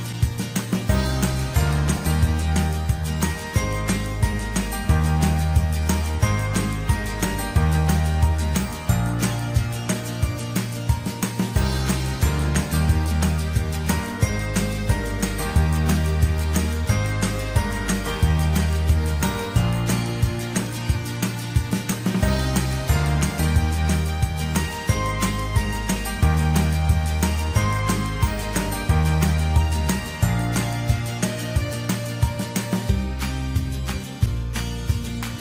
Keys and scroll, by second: 13.9 ctrl+shift+], 15.5 ctrl+t.